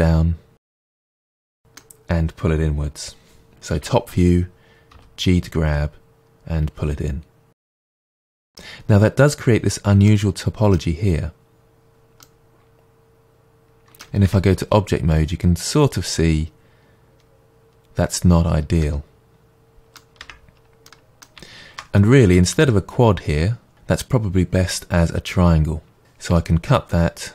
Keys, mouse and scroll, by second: 1.2 click, 1.4-7.6 middle drag, 3.7 KP_7, 4.9 g, 7.6 click, 7.8-19.7 middle drag, 14.2 Tab, 20.1 Tab, 20.9 middle click, 21.5-22.3 shift+scroll up 2, 22.3 shift+middle click, 26.3 k.